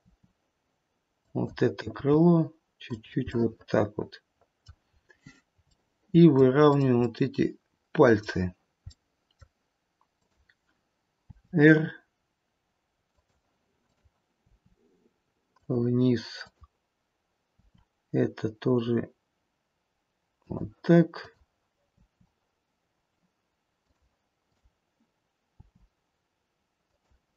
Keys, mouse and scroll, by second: 1.9 g, 3.2 middle click, 4.4 middle click, 4.9-5.6 scroll up 1, 5.7-6.3 shift+scroll up 1, 6.3 shift+middle click, 6.7 shift+middle click, 6.7 scroll up 1, 7.0 middle click, 9.3 middle click, 10.2 click, 11.2 r, 13.8 click, 14.6 r, 16.4 click, 17.5 r, 21.0 click, 21.9 r, 24.5 click, 25.6 r.